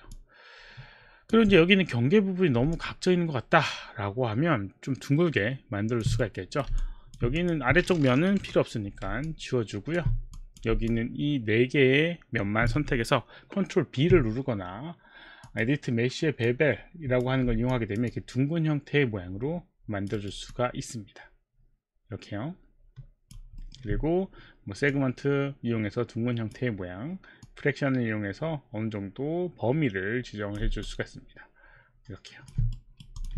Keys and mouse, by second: 0.1 alt+click, 0.1 alt+middle click, 0.1 alt+right click, 2.8 alt+click, 6.1 right click, 6.8 alt+click, 7.4 click, 8.5 Delete, 9.2 alt+click, 9.4 alt+click, 10.0 alt+click, 10.3 click, 11.3 alt+click, 15.5 click, 17.2 click, 18.1 alt+click, 20.2 alt+right click, 21.1 alt+click, 23.6 alt+middle click, 24.9 click, 27.4 click, 30.9 alt+click, 32.7 right click, 33.2 click.